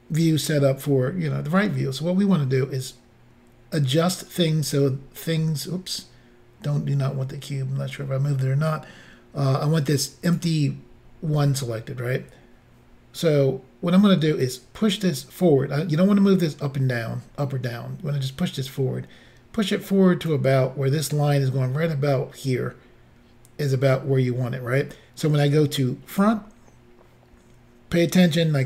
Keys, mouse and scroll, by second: 2.9 click, 10.3 click, 14.4 click, 26.1 click.